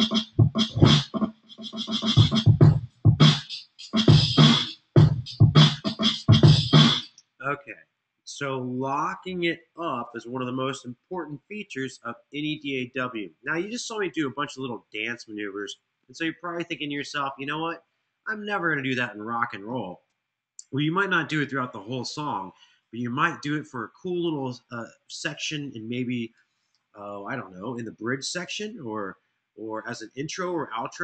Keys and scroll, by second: 6.7 space.